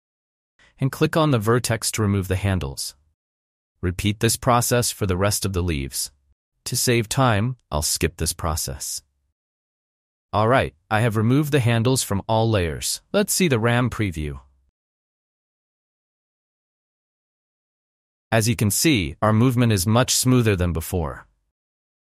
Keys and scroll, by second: 9.3 space, 13.7 v, 15.1 space, 20.2 space.